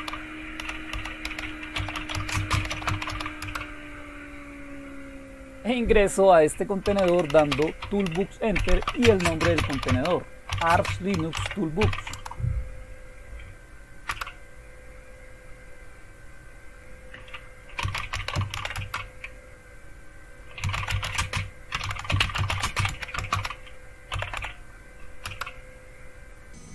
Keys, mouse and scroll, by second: 0.0-3.6 typing, 6.6-12.3 typing, 14.1 Return, 17.6-19.0 typing, 20.4-25.2 typing.